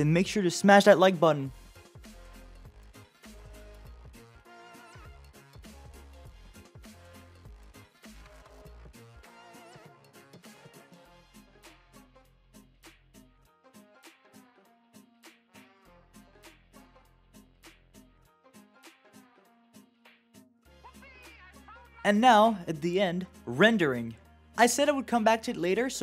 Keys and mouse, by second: 0.2 click, 0.8-1.2 drag, 1.6 click, 1.7 click, 1.8 click, 2.0 click, 2.3 click, 2.5 click, 2.6 click, 2.8 click, 3.5 click, 3.7 click, 4.0 click, 4.4 click, 4.9 click, 5.0 click, 5.2 click, 5.3 click, 5.3 click, 5.4 click, 5.7 click, 6.0 click, 6.8 click, 8.9 click, 9.1 click, 9.2 click, 9.5 click, 9.9 click, 12.2 shift+d, 12.8 click, 13.1 middle click, 13.8 click, 13.9 click, 14.0 click, 14.1 click, 14.2 click, 14.3 click, 14.3 click, 14.5 click, 14.7 click, 15.2 click, 16.4 click, 16.7 click, 16.8 shift+click, 19.5 click, 21.6 shift+middle click.